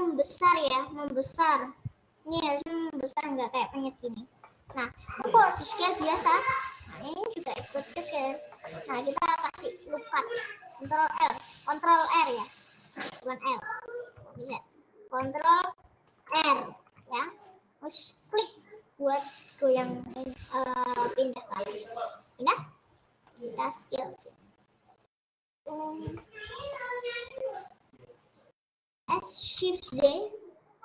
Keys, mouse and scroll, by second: 4.3 click, 4.7 middle click, 5.2 click, 5.6 middle click, 6.2 s, 7.8 ctrl+z, 8.5 scroll up 2, 8.5 middle click, 9.0 click, 9.5-11.1 middle drag, 11.1 ctrl+r, 14.4 ctrl+z, 16.2 ctrl+r, 23.4-26.6 drag, 26.7 middle click, 26.9-27.4 scroll down 3, 28.3 scroll up 1, 29.1 s.